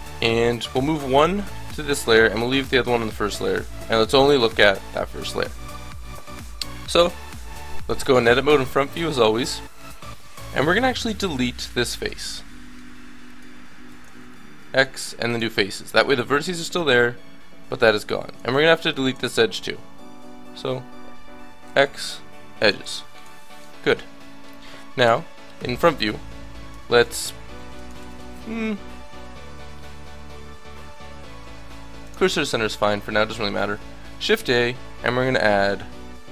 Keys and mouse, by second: 1.1 m, 2.3-3.5 middle drag, 3.9 click, 4.9 middle click, 6.9 KP_1, 8.5 Tab, 12.5 middle click, 13.2 click, 14.1 x, 15.7-17.2 middle drag, 17.7 middle click, 20.7-23.0 middle drag, 21.6 x, 25.0 KP_1, 27.5-31.4 middle drag, 28.1 shift+s, 32.3-36.3 middle drag, 34.1 shift+a.